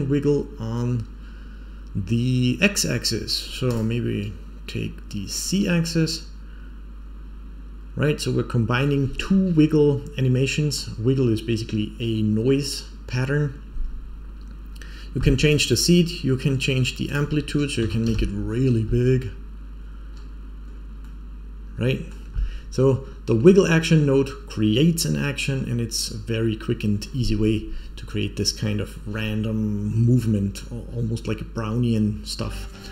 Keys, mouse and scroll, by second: 0.5 scroll up 2, 2.2-3.2 scroll up 1, 3.2 click, 3.6 click, 5.6-6.6 middle drag, 7.1-10.7 middle drag, 15.4 click, 17.0-18.4 drag, 20.0-20.6 scroll down 4, 20.6-21.0 scroll up 2, 21.0-22.0 middle drag, 21.2 scroll up 1, 22.9 scroll down 2, 26.9 scroll up 3.